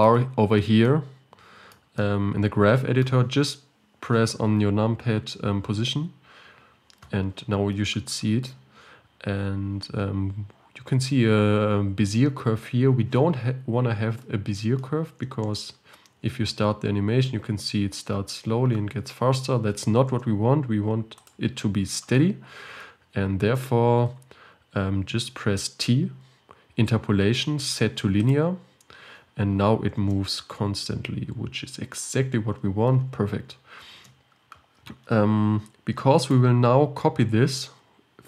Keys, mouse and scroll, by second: 15.5 space, 20.1 space, 21.3-28.5 drag, 30.0 space, 34.0 space, 36.3-38.2 drag.